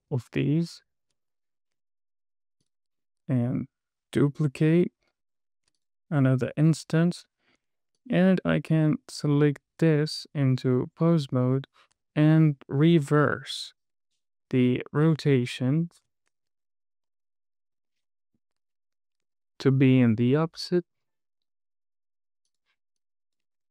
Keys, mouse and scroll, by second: 0.6 shift+click, 3.0 click, 4.7 shift+d, 6.2 click, 6.5 space, 8.0 space, 8.3 drag, 9.2 click, 10.3 Tab, 11.7 click, 12.7 drag, 13.6 click, 17.4 KP_Add, 17.6 KP_Add, 17.7 KP_Add, 17.8 KP_Add, 17.9 KP_Add, 18.1 KP_Add, 18.2 middle click, 19.6 s, 22.8 click, 23.3 drag.